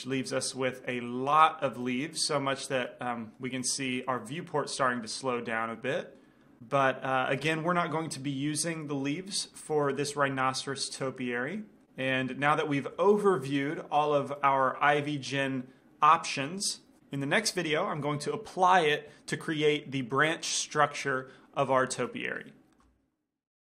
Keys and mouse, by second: 0.0-3.0 middle drag, 3.3-6.6 middle drag, 8.9-10.7 drag, 11.6 click, 12.6-17.5 middle drag.